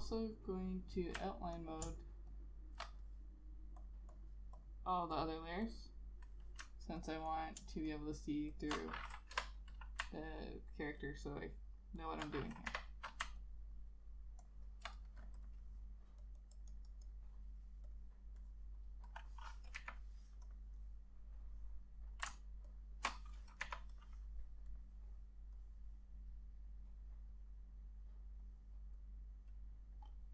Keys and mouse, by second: 1.7 ctrl+click, 4.3 double click, 7.1 ctrl+click, 9.5 Delete, 11.1 ctrl+click, 12.1 ctrl+click, 12.8 Delete, 13.5 ctrl+click, 14.6 ctrl+click, 16.5 double click, 19.9 Delete, 22.5 ctrl+shift+click, 22.8 ctrl+shift+click, 23.7 Delete.